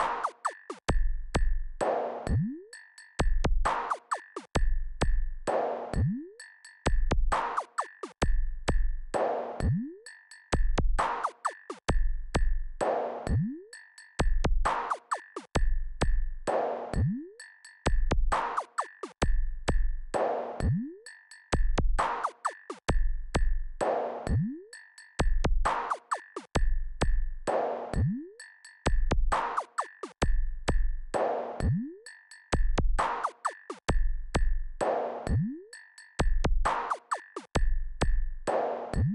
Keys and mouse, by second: 1.9-2.5 ctrl+KP_6, 2.8 KP_Subtract, 3.1 KP_Subtract, 3.1 KP_Add, 4.0-7.2 drag, 9.3-12.5 drag, 14.2 KP_4, 14.4 KP_4, 14.7 KP_4, 17.2 click, 29.6 shift+click, 31.4-35.2 drag, 35.5 click.